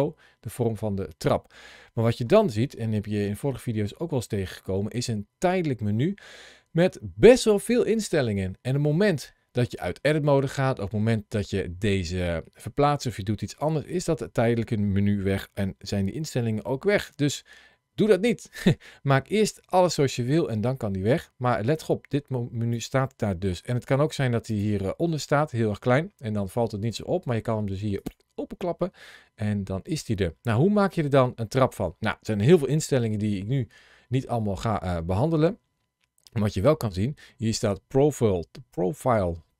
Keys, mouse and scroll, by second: 2.3 ctrl+shift+a, 24.3 click, 27.8 click, 35.6-38.4 scroll down 1.